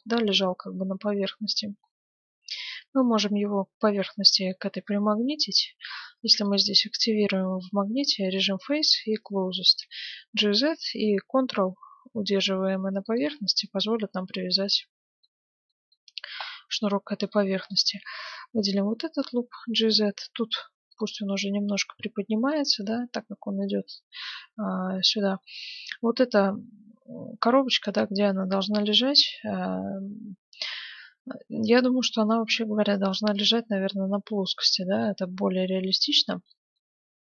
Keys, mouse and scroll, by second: 1.4 middle click, 2.0-3.5 scroll down 1, 3.5-3.8 scroll down 1, 6.4-8.3 drag, 9.8 g, 13.6-15.4 middle drag, 15.7-18.2 middle drag, 17.2-19.3 right drag, 18.6 g, 21.3-23.0 middle drag, 23.6-28.6 middle drag, 37.0 Tab.